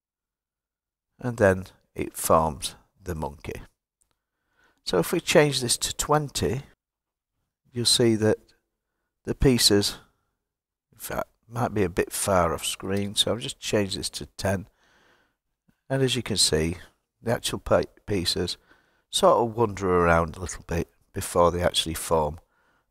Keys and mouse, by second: 4.6-6.7 drag, 11.4-14.1 drag.